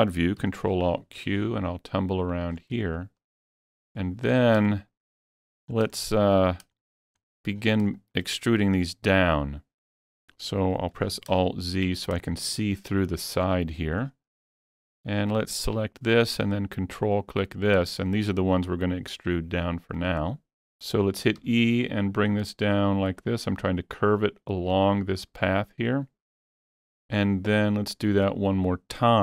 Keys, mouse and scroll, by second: 0.5 ctrl+alt+q, 1.7 middle click, 2.6 scroll down 2, 3.7 scroll down 1, 4.8 shift+middle click, 5.7 scroll up 2, 6.8 shift+middle click, 7.3-7.6 scroll down 1, 7.6 scroll up 1, 8.0 shift+middle click, 11.0 alt+z, 11.5 shift+middle click, 12.0-12.6 scroll up 2, 14.1 shift+scroll up 1, 14.8-15.7 shift+scroll up 2, 15.7 scroll up 1, 15.8 click, 17.2 ctrl+click, 21.4 ctrl+click, 21.4 scroll up 1, 21.6 e, 23.1 ctrl+click.